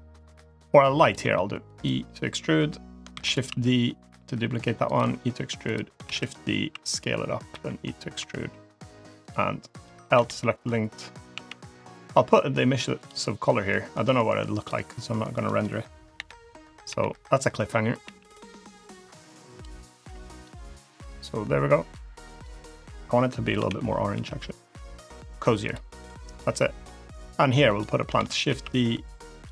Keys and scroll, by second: 1.1 e, 3.0 shift+d, 3.3 s, 4.8 e, 5.9 shift+d, 7.4 e, 7.4 s, 8.0 e, 10.0 l, 11.2 g, 13.8 g, 16.0 l, 16.7 l, 17.9 g, 23.4 l, 24.0 g, 28.0 shift+d, 28.3 s, 29.3 e.